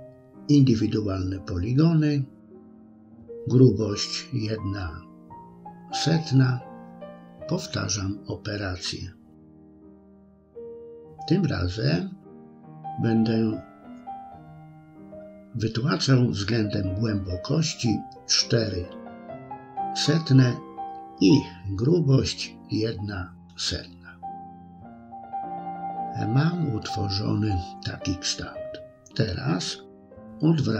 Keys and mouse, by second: 2.0 middle click, 8.3-13.9 drag, 14.7-15.8 middle drag, 19.2-22.8 drag, 23.4-25.9 middle drag, 26.5 middle click, 30.1 click.